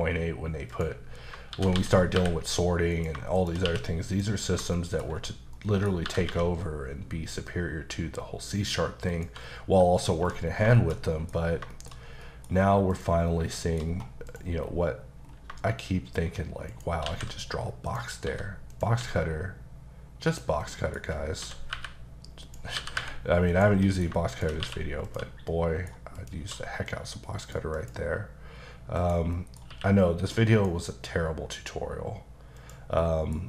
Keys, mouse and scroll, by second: 0.7 click, 1.2 scroll down 1, 1.6 shift+d, 2.9 click, 3.4 shift+click, 3.6 click, 3.7 q, 4.1 click, 4.8 shift+middle click, 5.0 middle click, 5.2-5.6 scroll down 2, 5.6 middle click, 6.1 typing, 9.1 click, 9.6 scroll down 1, 9.9 middle click, 10.2 1, 10.5 scroll down 2, 10.8 shift+middle click, 11.4 scroll up 2, 11.7 shift+middle click, 12.0 scroll down 1, 12.2 middle click, 12.6-12.9 scroll up 2, 12.9 click, 13.6 shift+middle click, 13.8-14.3 scroll up 2, 14.3 click, 14.7-15.1 scroll up 1, 15.3 scroll down 1, 16.7 shift+right click, 17.1 shift+a, 17.9 click, 18.3 s, 18.7 click, 19.0 s, 20.3 click, 20.6 middle click, 21.1 scroll up 1, 21.4 s, 22.4 click, 22.8 g, 23.5 click, 23.8 middle click, 24.3 shift+click, 24.6 q, 25.1 click, 25.5 middle click, 26.2 click, 26.4 q, 26.9 click, 27.8 click, 28.5-29.0 scroll down 1, 29.0 click, 29.3 middle click, 29.7 q, 30.5 click, 32.6 click, 33.0 middle click.